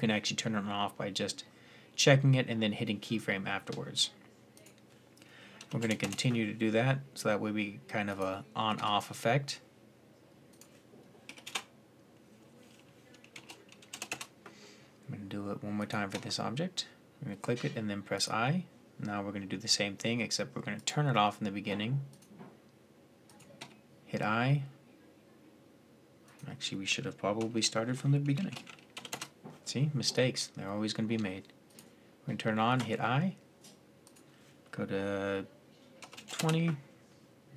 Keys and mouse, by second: 4.3-13.9 drag, 8.5 i, 15.5-20.5 drag, 15.9 i, 20.5 click, 23.4 i, 26.0-27.9 drag, 31.5-35.7 drag, 32.5 i.